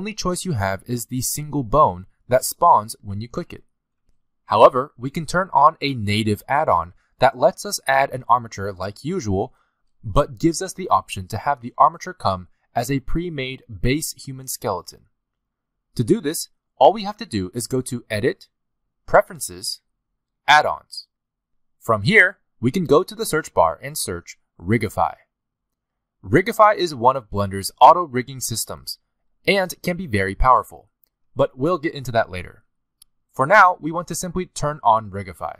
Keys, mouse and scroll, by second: 2.7 g, 9.9 ctrl+z, 17.4 click.